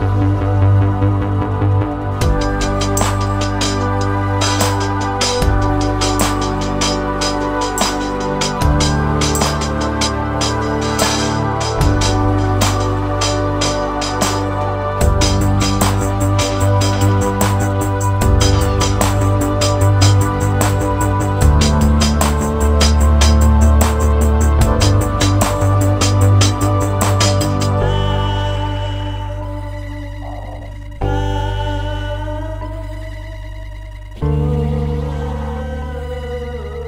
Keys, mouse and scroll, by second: 0.0 middle click, 2.6 click, 3.7 click, 4.4-4.8 scroll down 1, 4.8 shift+middle click, 6.3 click, 14.3 space, 14.6-16.0 scroll up 9, 16.0-16.4 scroll down 2, 16.4 scroll down 2, 16.6 shift+middle click, 17.2-18.2 scroll down 5, 18.7 click, 19.2 scroll down 2, 19.5 middle click, 20.1 click, 20.8 shift+d, 21.8 scroll down 4, 21.9 middle click, 22.8 ctrl+z, 23.3 click, 23.9 click, 24.5 click, 25.0 click, 26.0 click, 26.7 click, 27.8 click, 28.0 click, 28.8 shift+d, 29.8 shift+d, 30.8 middle click, 31.4 click, 32.4 middle click, 33.4 shift+d, 33.7 click, 34.1 shift+d, 34.8 click, 35.4 click, 36.3-36.8 scroll up 8.